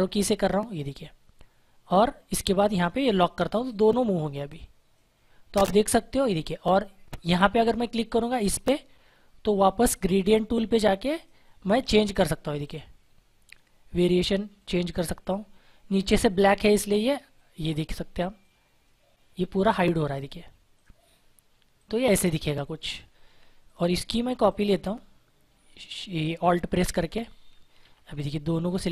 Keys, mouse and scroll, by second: 2.3 click, 7.2 click, 11.1 click, 24.4 click, 27.7 z, 28.6 click.